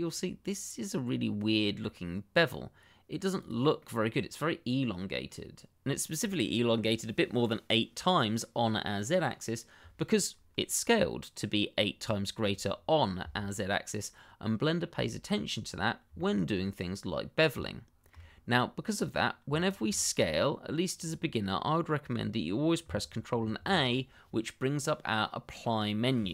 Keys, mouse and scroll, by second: 2.5 click, 2.8 middle click, 4.7 shift+middle click, 5.0 middle click, 12.7-14.1 scroll down 1, 14.1 middle click, 15.7-16.0 scroll down 1, 16.1 shift+middle click, 17.6 shift+middle click, 17.6 middle click, 17.8 shift+middle click, 18.9 click, 19.5 shift+middle click, 20.3-22.3 scroll up 1, 23.3 ctrl+a.